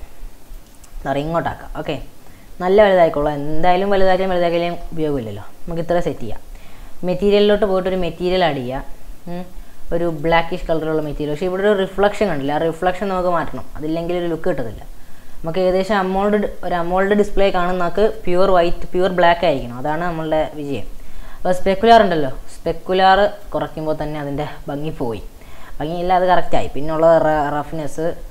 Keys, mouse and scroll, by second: 0.8-2.2 middle drag, 2.2 scroll up 1, 2.4 s, 3.4-4.5 scroll down 9, 4.5-6.2 scroll up 11, 7.2-10.2 drag, 11.4-14.9 middle drag, 14.9-17.6 scroll down 3, 17.6 scroll down 1, 18.0-22.6 middle drag, 22.6-23.7 drag, 23.7-26.7 middle drag, 26.7-27.8 drag, 27.8-28.3 scroll down 1.